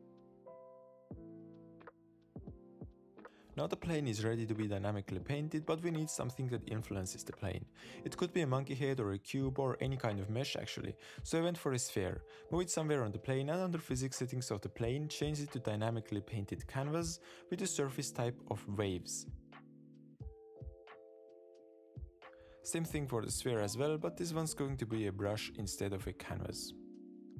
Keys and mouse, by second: 0.0 click, 0.1 click, 0.4 click, 1.0-2.1 middle drag, 2.7 click, 3.0 click, 3.2 click, 4.1 middle click, 5.0 middle click, 5.4 Tab, 5.9 click, 5.9-6.9 middle drag, 7.7 click, 8.6 shift+click, 9.3 shift+drag, 10.0 shift+right click, 10.1 shift+a, 12.3 s, 12.8 g, 16.0 click, 17.1 click, 17.9 click, 19.1-19.5 drag, 21.7-22.4 drag, 23.1 click, 24.6 click, 25.2 click, 25.4-25.9 drag, 26.4 click.